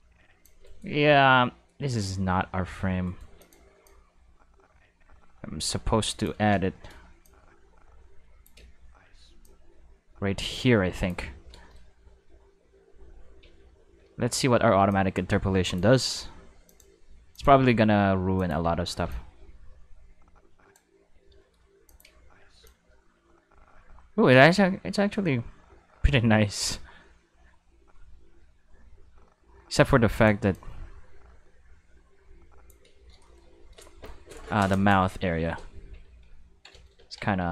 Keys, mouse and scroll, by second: 0.6 right click, 1.8 x, 3.0 right click, 3.2 x, 3.3 click, 3.8-6.2 drag, 6.7 shift+middle click, 7.2-8.4 drag, 8.5 space, 9.2 space, 9.4-11.0 drag, 11.6 shift+middle click, 12.2 q, 13.3 Tab, 14.1 a, 14.8 click, 16.6 click, 17.3 click, 18.3 click, 18.6 space, 19.0 space, 19.0-20.7 drag, 21.0 q, 21.3 shift+middle drag, 21.8 click, 22.0 space, 22.6 space, 22.6-30.2 drag, 30.5-32.6 drag, 33.2-33.6 shift+middle drag, 35.8 q, 36.5 ctrl+middle drag, 36.7-37.1 ctrl+shift+middle drag, 37.4 ctrl+Tab.